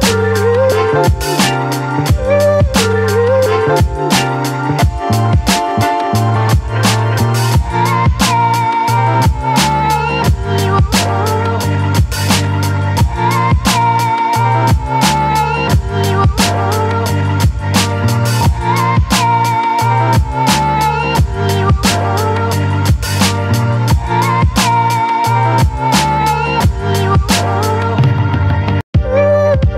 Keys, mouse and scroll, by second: 8.7 ctrl+e, 10.1 click, 11.2 ctrl+a, 11.8 ctrl+c, 12.7 click, 13.1 space, 13.4 click, 13.6 space, 14.3 click, 15.8 ctrl+v, 17.0 right click, 18.2 click, 19.3 ctrl+t, 20.7-29.6 alt+drag, 29.6 space.